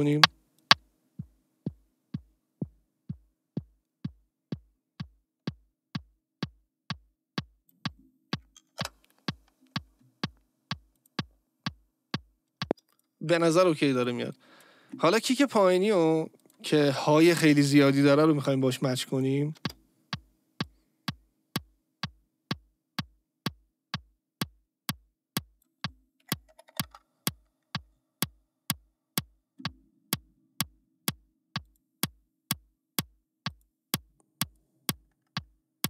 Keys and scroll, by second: 8.8 Return, 12.6 space, 19.5 space, 26.8 Return.